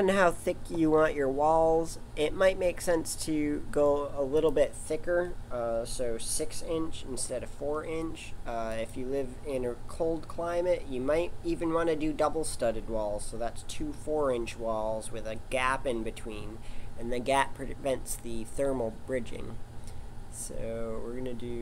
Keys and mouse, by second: 1.0-4.4 middle drag, 4.4 click, 8.7 click.